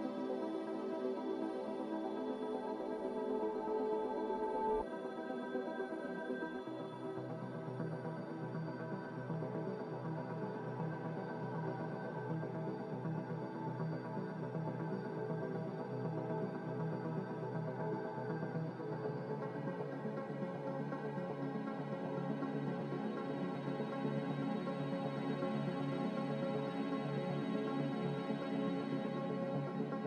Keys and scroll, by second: 0.6 a, 5.1 g, 7.7 z, 10.2 Escape, 11.0 Delete, 11.7 g, 14.4 z, 17.0 a, 25.6 b, 26.5 Delete, 28.9 Delete.